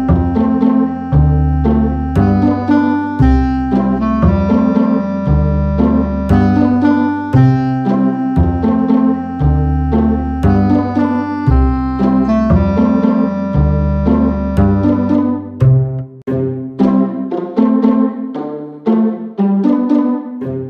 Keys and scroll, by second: 0.9 super+d, 2.4 shift+Left.